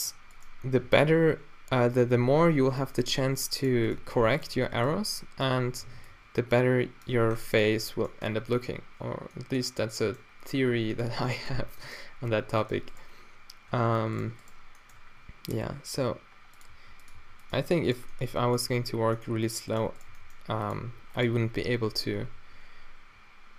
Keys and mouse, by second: 0.3-0.9 drag, 0.9 alt+w, 2.2-6.1 typing, 2.7 alt+w, 7.1 f, 7.7 Tab, 8.2 Tab, 10.6-11.2 middle drag, 12.6-16.2 middle drag, 16.0 e, 16.8 r, 17.2 s, 17.6 g, 19.1 g, 20.2 g, 20.8 g, 22.0 z, 22.3 t, 23.1 a.